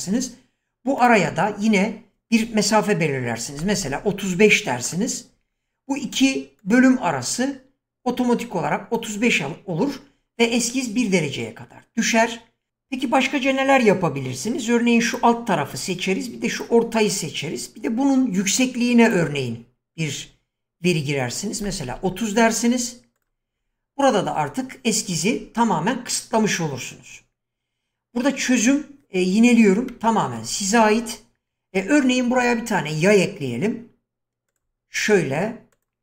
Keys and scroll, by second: 3.2-4.2 typing, 21.5 typing, 23.2-23.9 typing.